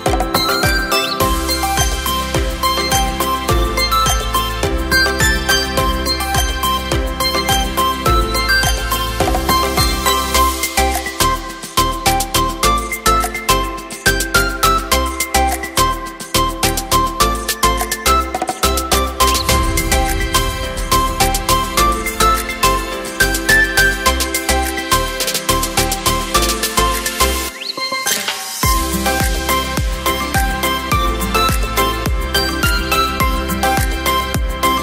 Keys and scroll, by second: 28.8 t, 30.8 c, 31.1 h, 32.3 o.